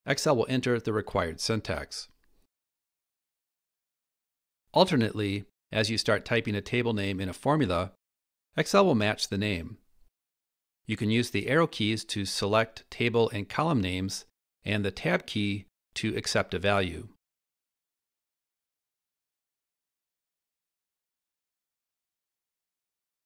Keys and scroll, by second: 4.4 Escape, 11.0 Down, 12.2 Down, 12.3 Up, 14.8 Tab, 16.9 Down, 19.6 Tab.